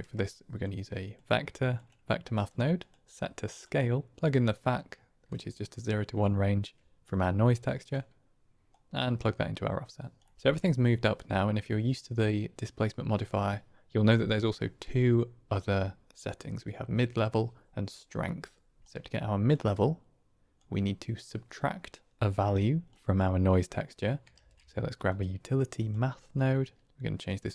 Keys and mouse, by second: 2.8-3.7 drag, 4.6-6.9 drag, 7.4 click, 8.6-9.4 drag, 10.1 click, 10.3 KP_1, 18.8 click, 19.6-20.6 drag, 22.8 middle click, 24.2 shift+a, 26.7 click, 27.0-27.5 drag.